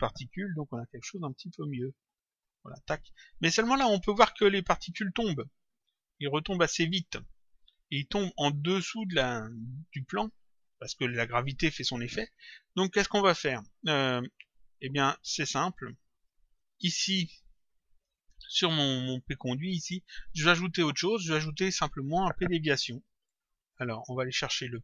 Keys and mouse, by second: 0.8 click, 8.2 click, 9.4 click, 15.6 click, 17.8 click, 19.2 click.